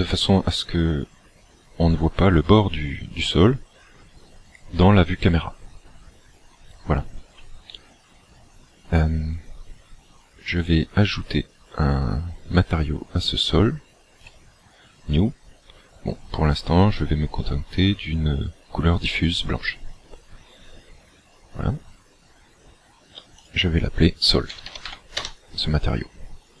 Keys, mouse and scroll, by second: 14.2 click, 23.5 click.